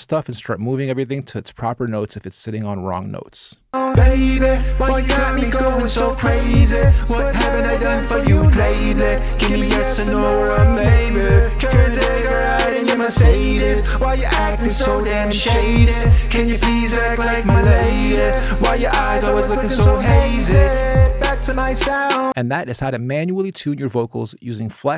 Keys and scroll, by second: 3.5 space.